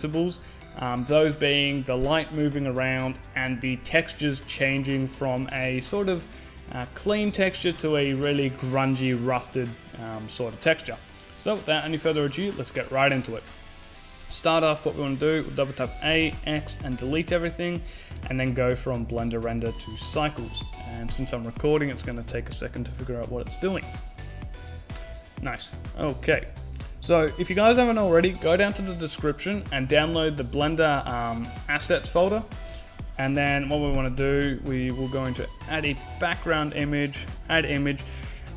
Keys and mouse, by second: 16.0 a, 16.2 a, 16.8 x, 18.4-25.4 drag, 34.2 n, 36.0-38.0 drag.